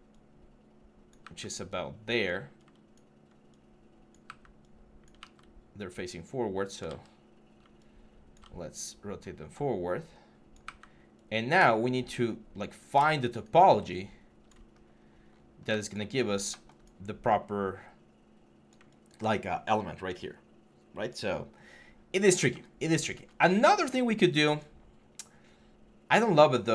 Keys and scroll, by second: 1.0 w, 4.7-5.5 typing, 6.7 ctrl+z, 7.1-8.2 typing, 10.4 w, 14.5 6.